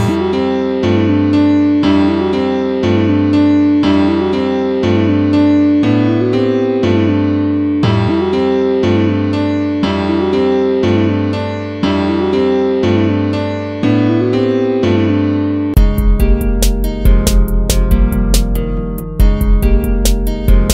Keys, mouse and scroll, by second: 7.1 ctrl+-, 11.4 ctrl+-, 13.8 ctrl+-, 15.5 ctrl+-, 19.6 ctrl+-.